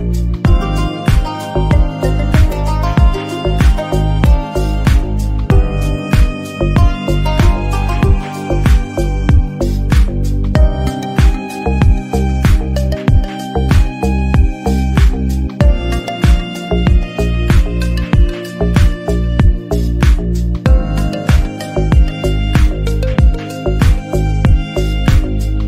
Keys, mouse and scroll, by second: 0.2 ctrl+z, 1.2 g, 1.6 ctrl+s, 1.9 shift+a, 2.4 ctrl+a, 2.9-3.5 right drag, 3.8 r, 4.7 Tab, 4.8 a, 4.9 s, 5.3 g, 5.7 middle click, 6.0-6.5 scroll up 3, 6.1 alt+z, 6.5 s, 7.0 g, 7.5 alt+s, 8.3 ctrl+r, 9.0 alt+click, 9.6 s, 10.1 o, 10.2 s, 11.3 a, 11.3 alt+s, 12.6 Tab, 12.8 alt+z, 12.9 middle click, 13.7 alt+s, 13.8 Tab, 14.2 alt+s, 15.0 middle click, 15.6 scroll up 2, 15.6 middle click, 15.9 scroll down 1, 16.0 shift+middle click, 16.1 scroll up 1, 16.2 middle click, 16.8 Tab, 16.9 click, 17.1-17.4 scroll down 8, 17.7-18.1 scroll up 7, 18.1 g, 18.6 KP_1, 18.9 KP_3, 19.2 scroll down 3, 19.4 KP_1, 19.6 click, 19.7 middle click, 19.9-20.4 scroll up 4, 20.3 click, 20.4 Tab, 20.9 alt+z, 21.1 3, 21.2 click, 22.4-24.4 typing, 22.9 Tab, 25.0-25.4 scroll down 2, 25.1 shift+middle click, 25.4 alt+z, 25.5 middle click.